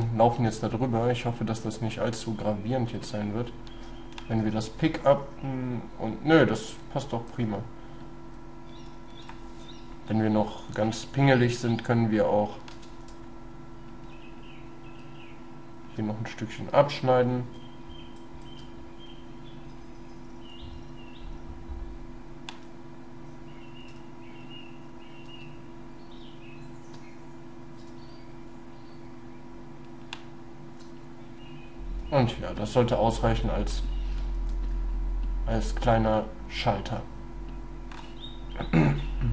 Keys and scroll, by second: 12.8 space, 16.0 space, 25.5 shift+space, 27.9 shift+space.